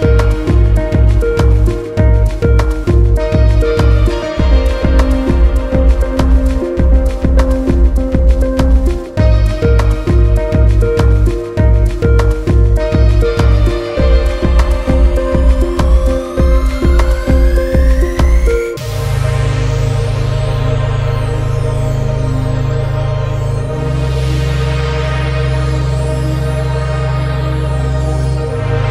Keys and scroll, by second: 15.7 ctrl+alt+z.